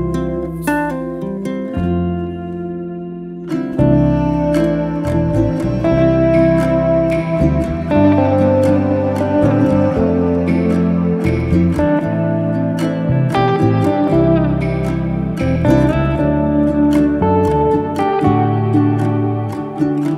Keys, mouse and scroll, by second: 2.9-4.4 middle drag, 5.7 scroll down 1, 6.0-7.5 middle drag, 9.1 Tab, 9.3 middle click, 9.9 s, 10.7-11.3 middle drag, 11.3 Tab, 11.9 shift+s, 12.7 Tab, 13.5 shift+a, 14.7 s, 16.9 Tab, 17.7 f, 17.9-18.9 middle drag, 18.9 e.